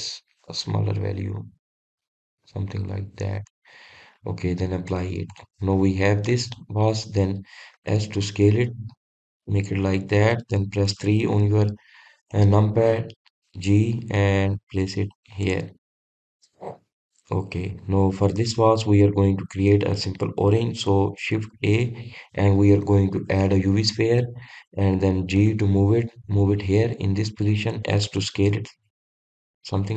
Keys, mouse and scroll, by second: 1.2-3.9 drag, 3.9-6.4 middle drag, 6.4-7.3 drag, 7.3-7.8 scroll down 2, 7.8-8.3 middle drag, 8.3 drag, 9.3 s, 11.2 click, 12.4 KP_3, 13.8 click, 17.0 drag, 17.3-17.8 scroll up 2, 17.8-18.6 middle drag, 18.6-19.3 scroll up 1, 19.3-20.6 middle drag, 20.6-21.1 scroll down 2, 21.1-22.9 scroll up 2, 23.0 shift+a, 28.6-29.0 scroll up 1, 29.0 click.